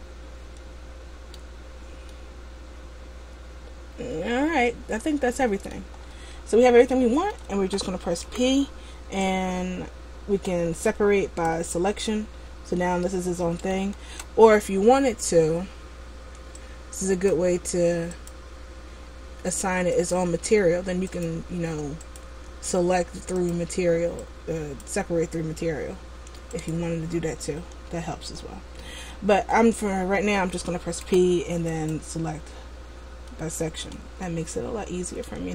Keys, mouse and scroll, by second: 1.7-2.1 scroll up 1, 2.3 middle click, 6.2-6.9 scroll down 3, 6.9 middle click, 8.4 p, 13.0 middle click, 14.2 ctrl+z, 16.7 click, 18.4 click, 20.1 click, 21.2 click, 22.2 click, 23.6 click, 26.8 click, 27.7 Tab, 28.4 Tab, 29.7 middle click, 31.2 p, 33.4 middle click, 34.4 middle click.